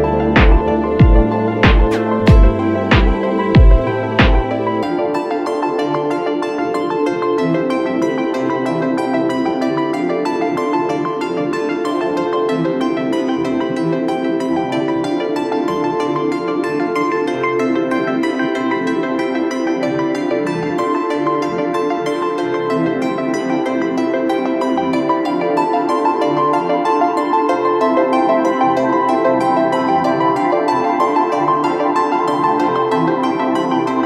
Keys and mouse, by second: 4.7-8.0 drag, 9.4-15.0 ctrl+middle drag, 15.0 click, 19.3 shift+d, 24.7 click, 26.5-34.0 drag.